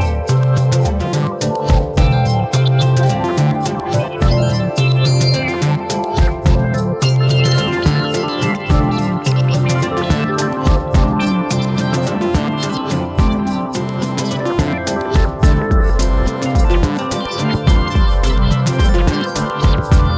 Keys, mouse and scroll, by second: 0.7 click, 1.1 click, 1.3-1.7 scroll down 1, 1.7 Tab, 2.1 click, 2.2 scroll down 1, 2.3 shift+middle click, 3.0 scroll up 2, 3.1-4.2 shift+middle drag, 4.2 scroll up 2, 4.4 click, 4.7 Tab, 5.4 shift+middle click, 5.6-6.2 scroll up 1, 6.4 click, 7.3 click, 7.5-7.9 scroll down 1, 7.9 ctrl+r, 9.1 Tab, 9.3 click, 9.5 scroll down 3, 9.6-10.0 shift+middle drag, 10.0 scroll up 1, 10.1-10.4 shift+middle drag, 10.4 click, 10.5 scroll up 1, 10.6 shift+middle click, 10.9 Tab, 11.2 scroll up 1, 11.4 shift+middle click, 12.0 ctrl+r, 14.4 scroll down 1, 14.5 middle click, 15.2 KP_1, 15.3-16.4 scroll up 3, 15.5 shift+middle click, 15.7 alt+/, 16.4 click, 16.7 shift+middle click, 17.5 shift+click, 17.9 g, 19.0 click, 19.6 shift+click, 20.0 g.